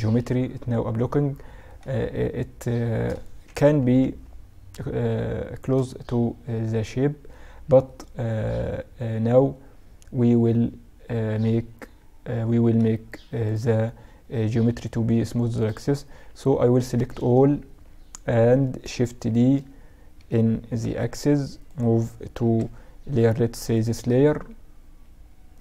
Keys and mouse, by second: 2.6 KP_Subtract, 15.2 z, 15.5 z, 15.9 a, 16.2 a, 18.3 shift+d, 21.6 m, 24.5-25.6 drag.